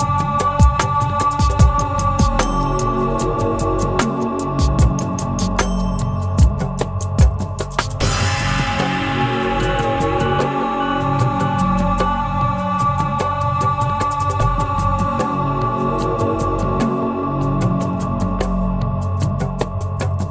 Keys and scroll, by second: 9.0 ctrl+e.